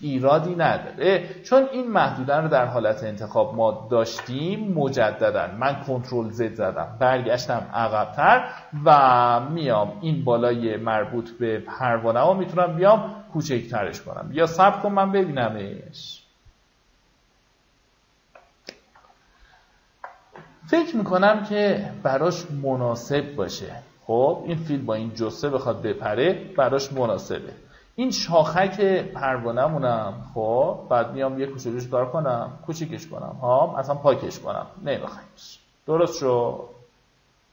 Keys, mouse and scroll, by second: 1.9 ctrl+z, 2.5 ctrl+z, 3.2 ctrl+z, 5.2 click, 8.2 Escape, 9.2 click, 18.6 ctrl+shift+z, 20.8-21.2 alt+scroll down 1, 22.1 alt+scroll up 1, 22.7-24.4 alt+scroll up 1, 24.4 alt+scroll up 1, 25.5 alt+scroll up 1, 26.6 alt+b, 28.0 click, 29.1 alt+right click, 29.6 alt+right click, 30.7 alt+right click, 31.9-36.2 drag, 36.4 alt+scroll down 1, 37.1-37.5 alt+scroll down 1.